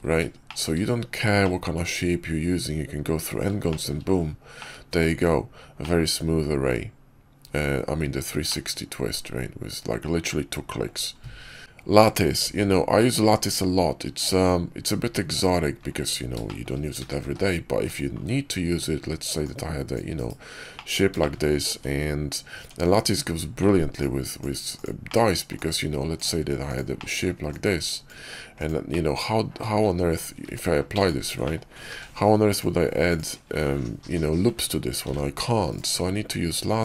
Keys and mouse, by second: 0.4 shift+middle click, 1.3-3.4 middle drag, 3.6 shift+middle click, 4.5 middle click, 5.0 Tab, 5.7-7.6 middle drag, 8.4-10.8 middle drag, 11.6 click, 12.3 shift+a, 16.3 shift+drag, 16.9 s, 19.3 click, 20.0 /, 20.6 drag, 21.1 shift+drag, 21.6 Tab, 22.5 Tab, 23.5 alt+w, 23.9-24.7 drag, 25.0 middle click, 25.4-26.7 drag, 26.9 middle drag, 27.4-28.6 drag, 28.8-29.5 middle drag, 30.3 q, 31.3 click, 31.8 q, 33.9 Tab, 34.9 ctrl+r, 36.1 Tab.